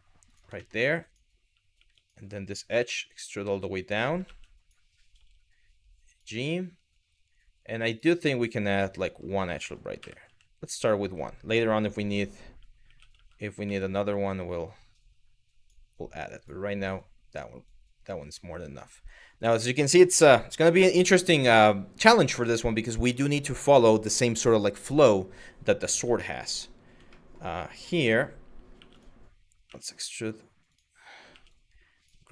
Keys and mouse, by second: 0.2 shift+middle click, 0.7 click, 1.4 2, 1.7 click, 2.4 e, 3.5 click, 4.2 click, 5.7 click, 8.5 click, 9.6 w, 9.9 q, 12.5 2, 13.5 click, 14.3 click, 15.9 click, 16.6 click, 17.3 click, 21.9 shift+middle click, 25.9 ctrl+middle click, 26.9 shift+middle click, 28.4 2, 28.5 click, 29.3 e, 30.3 click, 31.9 click.